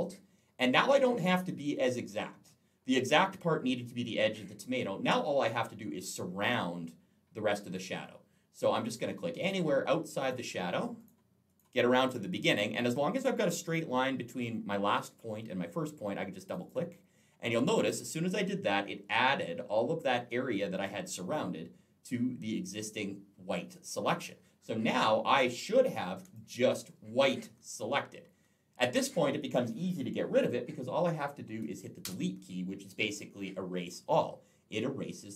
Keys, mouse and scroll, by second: 1.0 alt+scroll up 1, 1.2-1.7 alt+scroll down 1, 8.7 click, 9.2 click, 10.0 click, 10.8 click, 11.4 click, 11.8 click, 16.3 click, 16.5 click, 17.6 click, 24.3-26.1 alt+scroll down 1, 26.1 space, 26.1 click, 27.4-27.7 alt+scroll up 1, 31.9 Delete.